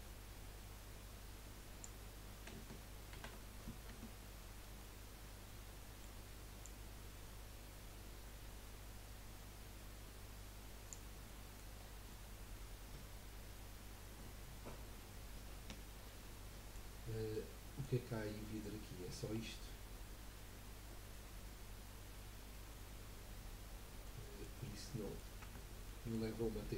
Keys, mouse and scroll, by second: 3.1 shift+d, 4.8-6.6 middle drag, 6.6 click, 11.3 middle click, 11.8-12.1 scroll down 2, 12.1-15.1 middle drag, 17.0 scroll down 2, 17.3-18.7 middle drag, 18.7 scroll down 4, 19.2-21.4 scroll up 2, 23.3-23.6 scroll down 2, 23.6 scroll up 3, 24.0 middle click, 24.4-25.0 scroll up 3, 25.0 middle click, 25.4 Tab, 25.8-26.3 middle drag, 26.3-26.6 scroll down 3, 26.6 middle click.